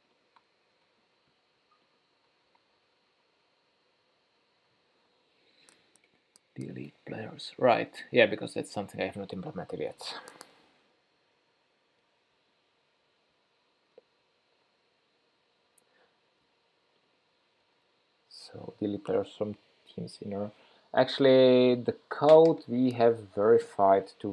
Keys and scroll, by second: 1.0 super+c, 2.6 super+f, 2.8 super+v, 11.2 shift+super+p.